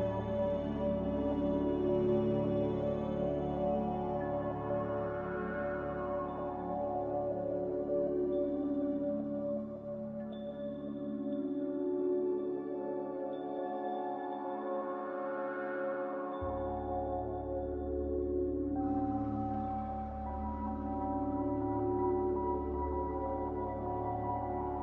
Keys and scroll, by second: 15.1 Delete.